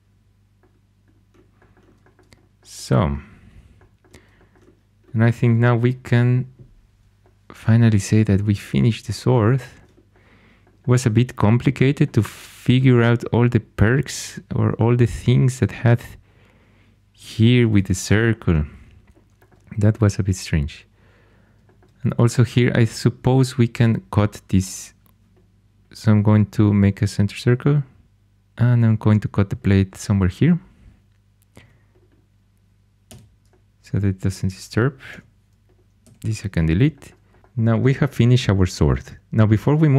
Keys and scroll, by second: 31.5 c, 33.0 x, 35.0 2, 36.0 x.